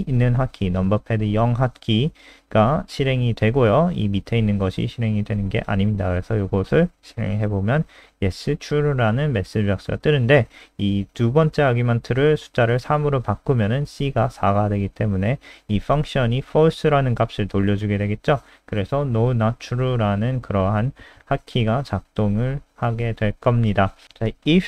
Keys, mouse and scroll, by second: 3.7 ctrl+s, 4.4 F5, 5.0 KP_0, 8.3 click, 9.6 Left, 9.8 BackSpace, 9.9 BackSpace, 10.3 ctrl+s, 10.4-11.4 scroll up 1, 11.4-12.4 scroll down 1, 13.8 click, 18.2 KP_0, 21.8 click, 22.6 super+3, 23.2-23.8 scroll down 4.